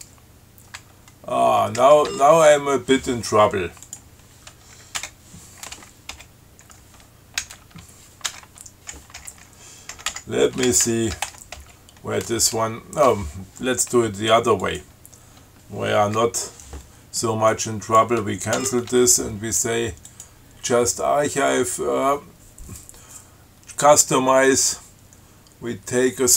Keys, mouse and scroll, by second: 2.0 d, 2.3 Tab, 2.7 BackSpace, 4.1 click, 5.2 Return, 6.4 n, 7.6 ctrl+c, 8.5 Return, 10.0-12.0 typing, 14.9 click, 16.4 BackSpace, 17.8 click, 18.8 ctrl+g, 20.3 click.